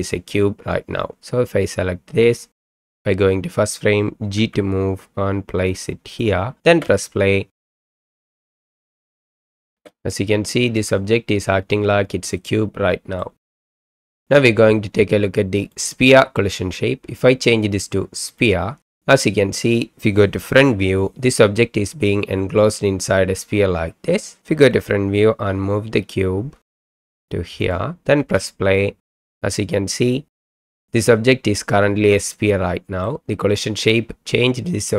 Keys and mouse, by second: 2.6 click, 4.4 g, 6.6 space, 8.8 space, 9.6 middle click, 9.7 space, 12.5-13.2 middle drag, 13.4 space, 13.8-14.2 middle drag, 15.7-18.5 middle drag, 20.6 KP_1, 22.9-24.4 middle drag, 24.7 KP_1, 26.6 g, 26.7 right click, 26.9 g, 27.6 right click, 28.2 space, 32.0 space, 32.5-33.0 middle drag.